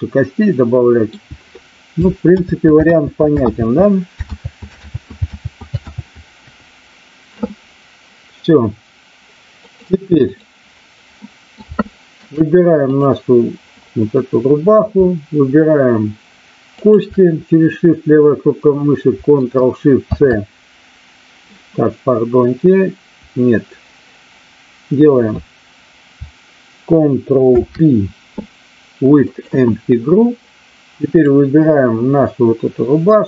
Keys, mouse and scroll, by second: 2.2 ctrl+z, 2.7 ctrl+z, 5.4 ctrl+z, 5.7 ctrl+z, 9.6-10.4 drag, 11.2-11.6 middle drag, 11.8-12.2 shift+middle drag, 13.0 click, 16.8 shift+click, 20.0 ctrl+shift+c, 27.4 ctrl+p, 31.1 click.